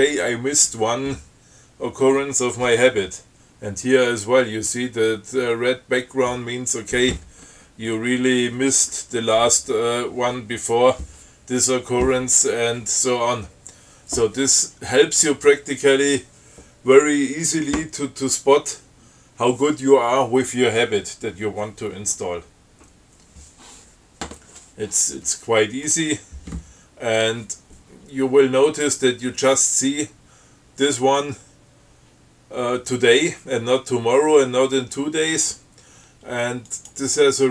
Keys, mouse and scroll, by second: 37.0 click.